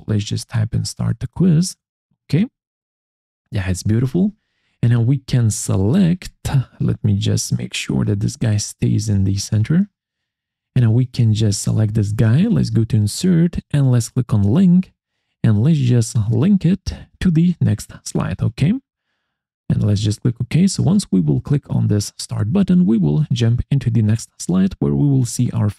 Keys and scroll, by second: 0.0-3.2 typing.